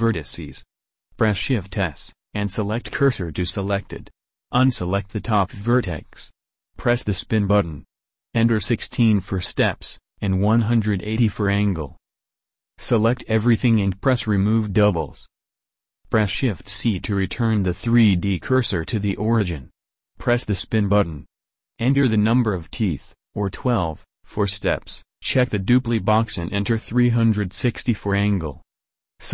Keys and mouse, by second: 4.8 b, 7.0-9.6 drag, 12.5 a, 12.8 a, 16.2 shift+c, 20.1-22.9 drag, 24.4-26.3 drag, 27.8-29.3 drag, 27.8 a.